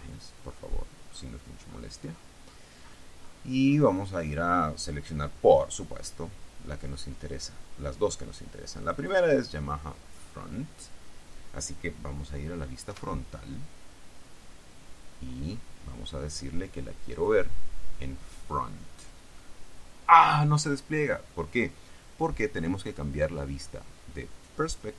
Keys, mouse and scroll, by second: 0.1-4.3 scroll down 9, 8.9 click, 13.1 KP_1, 15.4-16.1 scroll down 2, 17.3 click, 19.1 click.